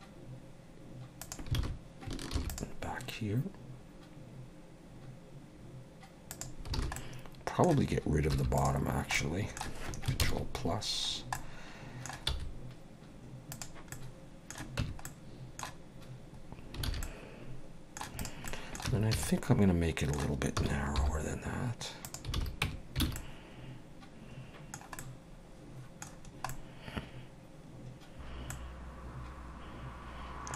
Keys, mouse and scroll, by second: 1.6 alt+a, 2.3 ctrl+r, 6.7 alt+a, 6.9 middle click, 8.3 3, 8.6 click, 9.1 middle click, 10.2 ctrl+KP_Add, 11.1 scroll down 2, 11.3 middle click, 12.3 x, 13.9 middle click, 14.8 Tab, 15.0 middle click, 16.8 alt+a, 17.0 middle click, 18.2 click, 18.5 middle click, 18.9 Tab, 19.1 a, 19.3 middle click, 20.5 s, 22.3 alt+a, 22.6 Tab, 23.0 alt+a, 23.2 middle click, 25.0 middle click, 26.2-26.5 scroll down 2, 26.5 middle click, 28.2-28.5 scroll up 2, 28.5 middle click.